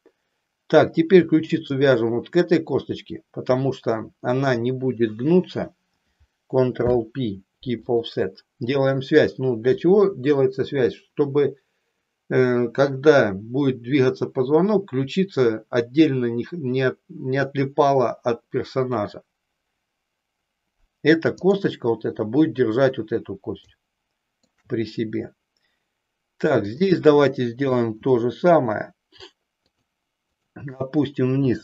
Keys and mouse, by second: 1.8 shift+click, 6.7 ctrl+p, 21.5 click, 23.7 shift+middle click, 26.7 click, 27.9 e, 30.3 click.